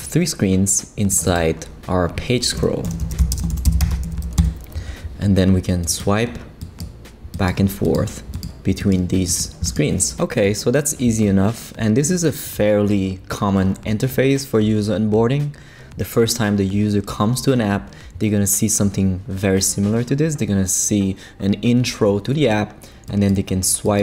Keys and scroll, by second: 2.6-4.5 typing.